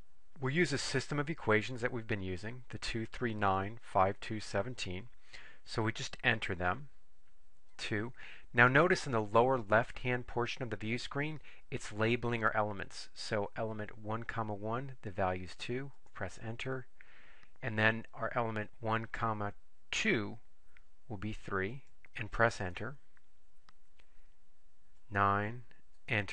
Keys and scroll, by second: 7.8 2, 16.0 Return, 21.9 3, 22.0 Right, 22.7 Return, 25.1 9, 26.1 Return.